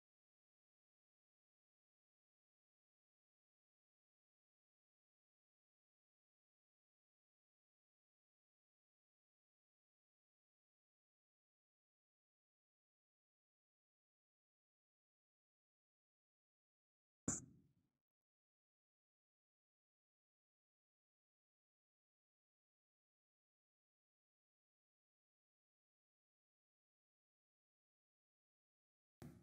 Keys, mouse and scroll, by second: 0.1 click, 0.9-1.4 scroll, 5.2 middle click, 5.2 alt+click, 5.6 alt+click, 6.3 alt+right click, 6.8 click, 11.4 click, 13.0 click, 15.2 click, 18.9 click, 20.0 alt+click, 20.8 click, 21.3 alt+middle click, 23.1 right click, 24.8 right click, 26.4-27.9 typing, 27.9 right click, 27.9 click.